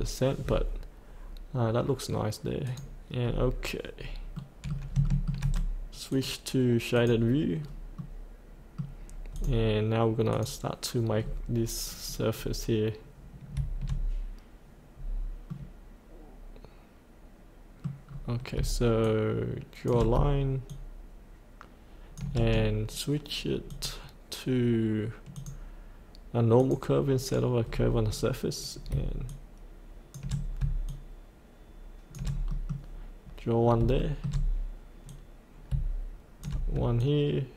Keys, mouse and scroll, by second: 2.6 click, 2.9 click, 3.3-4.0 scroll up 1, 4.3 middle click, 5.0 shift+middle click, 6.1 click, 7.6-8.0 scroll down 1, 8.0 middle click, 9.3 click, 11.2-12.3 scroll down 1, 14.9-15.5 scroll up 1, 15.5 middle click, 17.3 middle click, 18.1-18.5 scroll down 1, 19.0 shift+click, 20.7-22.1 shift+drag, 23.7 click, 27.7-28.1 scroll up 1, 28.1-28.9 scroll down 1, 29.3 shift+click, 30.9 shift+click, 32.5 middle click, 33.6 scroll up 1, 34.0 shift+middle click, 35.1-36.4 drag, 37.0-37.5 shift+drag.